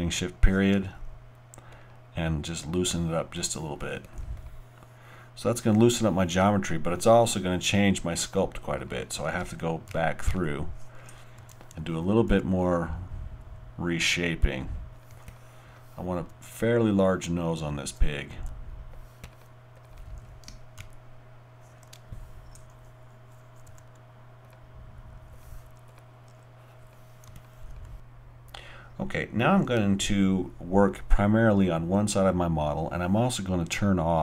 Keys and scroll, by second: 9.9 shift+., 10.3 shift+., 20.8 shift+>.